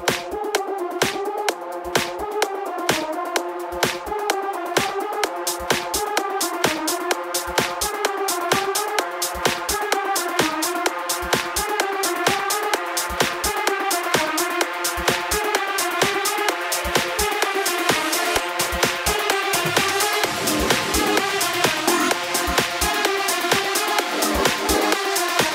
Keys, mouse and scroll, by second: 4.9 i, 6.7 KP_3, 8.3-9.4 scroll down 1, 9.4 shift+click, 17.6 r.